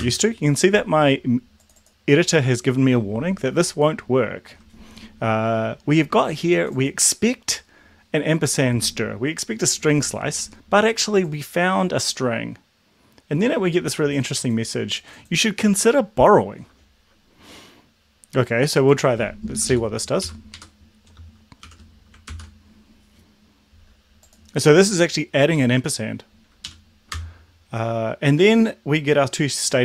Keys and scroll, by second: 19.9 Left, 20.0 Left, 20.4 Left, 20.6 Right, 21.6 shift+7, 22.4 ctrl+s, 26.7 Up, 27.2 Return.